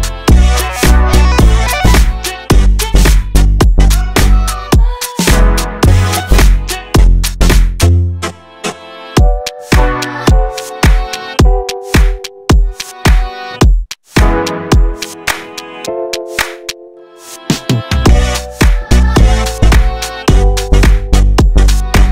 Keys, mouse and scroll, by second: 0.3 Tab, 0.4-1.4 middle drag, 1.4 Tab, 1.5 middle click, 1.9 click, 2.3 Tab, 2.4 scroll down 1, 2.5-3.0 middle drag, 3.0-3.4 scroll up 1, 3.4-4.5 drag, 6.2 shift+middle click, 6.6 Tab, 6.8 scroll up 1, 6.9 middle click, 7.5 3, 7.5 click, 7.9 middle click, 8.0-8.4 scroll up 2, 8.6 s, 9.6 Tab, 9.7 scroll down 1, 9.8 middle click, 10.3 Tab, 10.7 shift+middle click, 10.9 1, 11.1 click, 12.3 Tab, 12.3 scroll down 2, 12.5 shift+middle click, 12.9-13.5 scroll up 2, 13.1 middle click, 13.5 Tab, 14.0 2, 14.1 click, 14.5 middle click, 14.8 click, 15.8 Tab, 15.8 scroll down 1, 16.0 middle click, 16.2 KP_7, 16.3-16.7 scroll up 1, 16.7-17.0 shift+middle drag, 17.0 Tab, 17.1-17.5 scroll up 2, 17.5 alt+z, 17.9 1, 18.0 click, 18.5 g, 19.2 shift+middle click, 19.6 click, 20.0 g, 20.7 scroll down 1, 20.8 middle click, 21.0 alt+z, 21.1 middle click, 21.3 scroll up 1, 21.4 shift+middle click.